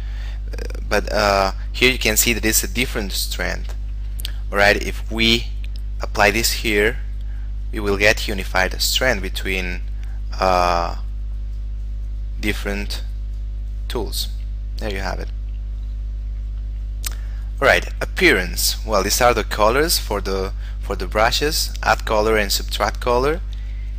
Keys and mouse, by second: 3.6 click, 17.8 click.